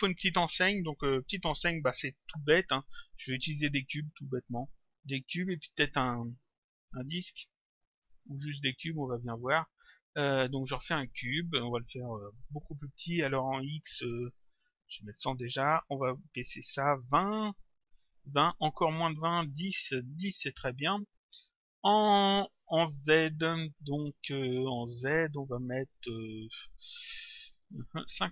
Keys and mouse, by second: 7.4 click, 9.0 click, 12.2 click, 14.8 Return, 16.0 click, 17.2 Return, 19.0 click, 19.7 Return, 25.7 click.